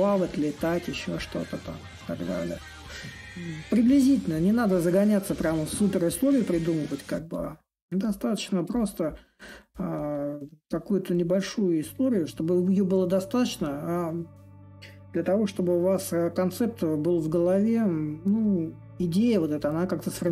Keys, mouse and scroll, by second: 0.0-5.0 drag, 5.7-10.7 drag, 11.5-16.6 drag, 18.1-20.3 drag.